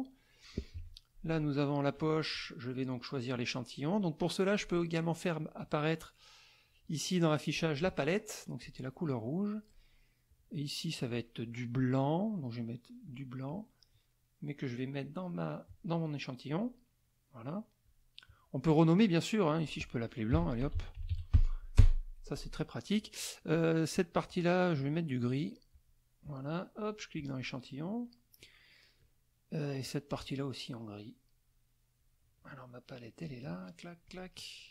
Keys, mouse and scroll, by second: 0.7 F1, 1.2 click, 4.6 click, 7.5 click, 8.6 click, 9.1 middle click, 10.3 click, 13.1 click, 15.0 click, 16.5 click, 18.8 click, 19.4 click, 20.1-21.6 typing, 21.8 Return, 24.3 click, 25.7 click, 27.2 click, 29.8 click, 33.2 click, 34.0 click.